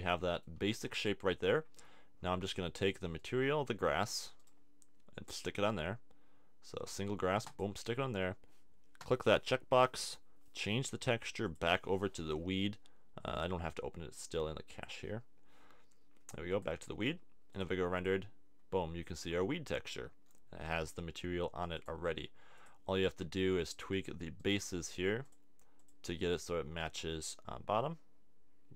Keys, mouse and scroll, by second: 9.1 click, 10.0 middle click, 21.9-23.2 drag, 23.2 Tab, 26.8 g.